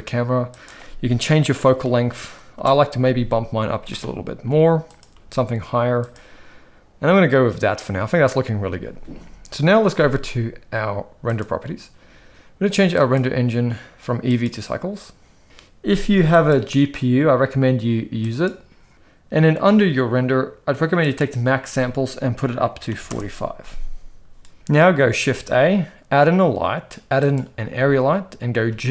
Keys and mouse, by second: 0.6-2.6 drag, 3.8 g, 5.1 g, 11.2 click, 13.1-14.4 drag, 16.3-18.4 drag, 21.1-23.1 drag, 25.1 shift+a, 28.7 g.